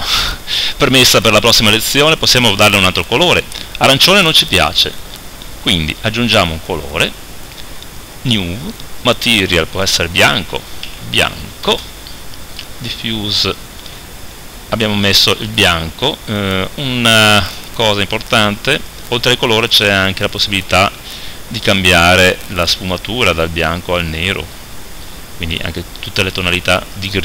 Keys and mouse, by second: 6.4-27.2 drag.